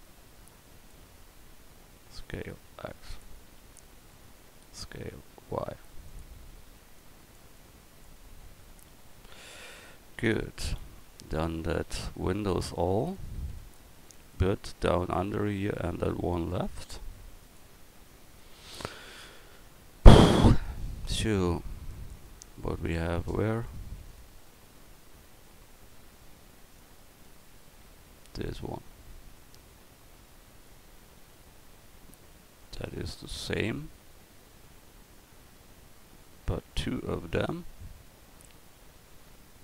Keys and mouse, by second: 1.9 s, 3.5 a, 4.8 s, 8.4 Tab, 8.9 a, 10.2 a, 10.8 a, 11.4 Tab, 11.9 a, 19.5 KP_1.